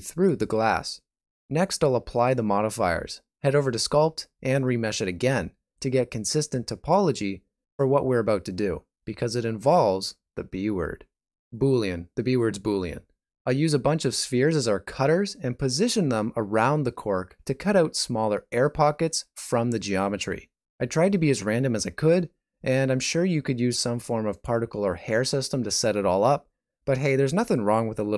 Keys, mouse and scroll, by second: 1.5 f, 2.0 alt+right click, 3.3 click, 5.1 scroll up 4, 5.4 shift+z, 5.6 middle click, 6.8 shift+z, 7.2 ctrl+middle click, 9.2 click, 10.7 shift+a, 12.5 scroll down 2, 14.0 scroll down 1, 14.8 f, 15.0 ctrl+z, 15.5 middle click, 15.9 shift+middle click, 16.7 shift+d, 18.4 g, 19.3 middle click, 19.8 g, 20.8 shift+d, 20.8 s, 21.3 Tab, 21.5 middle click, 22.8-23.2 scroll down 4, 23.2 middle click, 24.2 shift+middle click.